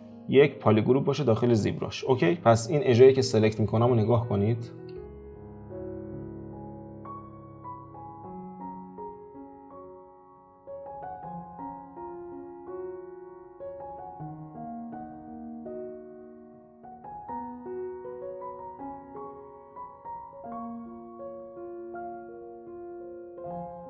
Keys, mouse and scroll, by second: 2.4 click, 4.6 scroll up 2, 5.1 alt+shift+click, 5.5 alt+shift+click, 6.2 alt+shift+click, 6.8 alt+shift+click, 7.2 ctrl+z, 7.3 middle click, 7.9 alt+shift+click, 8.1 shift+middle click, 8.8 alt+shift+click, 9.3 alt+shift+click, 9.9 alt+shift+click, 10.4 alt+shift+click, 10.8 middle click, 11.4 alt+shift+click, 11.9 alt+shift+click, 12.3 alt+shift+click, 12.7 alt+shift+click, 13.2 alt+shift+click, 13.7 alt+shift+click, 14.0 middle click, 14.3 scroll down 1, 14.9 alt+shift+click, 15.3 alt+shift+click, 15.7 alt+shift+click, 16.1 alt+shift+click, 16.8 alt+shift+click, 17.2 alt+shift+click, 17.8 alt+shift+click, 18.2 alt+shift+click, 18.5 alt+shift+click, 18.9 alt+shift+click, 19.1 middle click, 19.5 scroll down 2, 19.7 middle click, 20.4 alt+shift+click, 20.8 alt+shift+click, 21.2-22.5 middle drag, 22.5 alt+shift+click, 22.9 alt+shift+click, 23.4 alt+shift+click, 23.6 alt+shift+click.